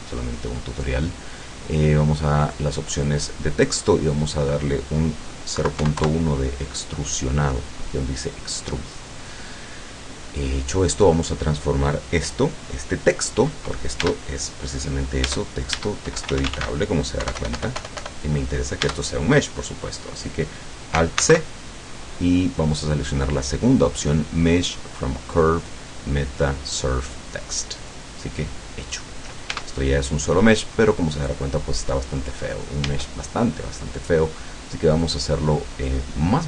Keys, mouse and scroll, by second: 2.5 click, 4.1 click, 5.6 KP_Decimal, 5.8 KP_1, 6.0 KP_Enter, 8.9-10.7 middle drag, 14.0 Tab, 15.3 Tab, 16.1-17.3 typing, 18.9 Tab, 21.2 alt+c, 27.9 click, 29.6 Tab, 31.7-32.3 scroll up 2, 32.5 scroll down 2, 32.9 Tab, 35.0 click.